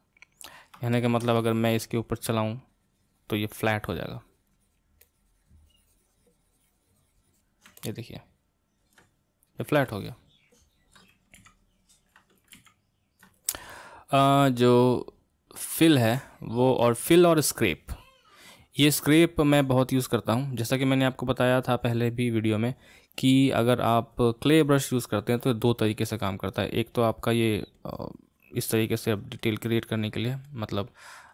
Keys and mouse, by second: 0.9-2.6 shift+middle drag, 2.6-7.8 drag, 7.8-11.5 middle drag, 11.5 ctrl+z, 12.7 ctrl+z, 15.6-21.4 drag, 22.0-31.3 drag.